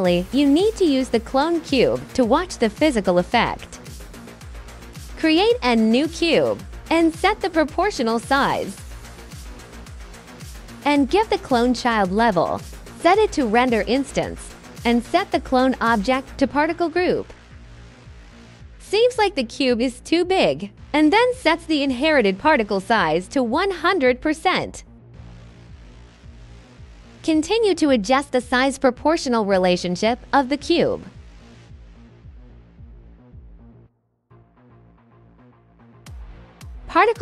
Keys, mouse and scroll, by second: 0.1 alt+click, 1.0 alt+click, 1.8 alt+click, 3.2 alt+click, 5.1 click, 6.8-8.0 typing, 6.8 click, 7.5 click, 8.2 click, 8.7 click, 9.4 KP_2, 9.6 KP_0, 9.8 click, 11.8 click, 12.8 click, 13.5 click, 14.3 click, 14.6 click, 15.8 click, 17.7 drag, 21.8 click, 22.2 click, 22.8 click, 23.6 click, 26.0 click, 27.0 click, 28.6 click, 28.8 KP_1, 29.4 click, 30.5 KP_2, 30.8 click, 32.4 alt+click, 33.2 alt+click, 33.8 alt+right click, 34.2-35.6 alt+drag.